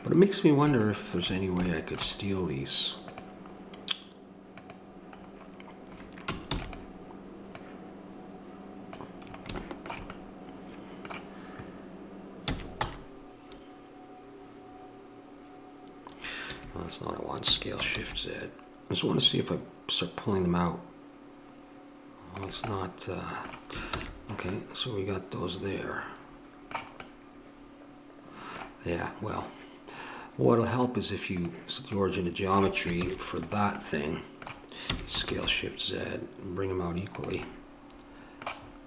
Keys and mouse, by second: 3.0-6.4 drag, 6.5 shift+d, 7.5-9.7 drag, 9.7-16.5 middle drag, 17.4 s, 23.9 ctrl+z, 30.7-32.3 drag, 32.3 middle click, 33.0 shift+s, 34.8 s.